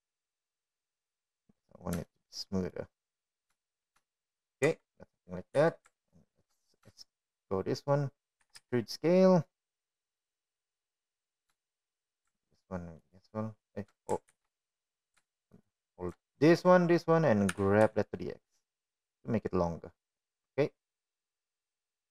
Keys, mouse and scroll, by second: 2.8-4.0 drag, 4.7 shift+middle drag, 5.4-5.8 middle drag, 6.7 shift+middle drag, 7.3 Tab, 8.3 2, 9.6 shift+middle click, 11.1 e, 13.5 middle click, 14.4 shift+middle click, 15.7 alt+shift+click, 17.0 ctrl+z, 17.0 ctrl+x, 20.3 g.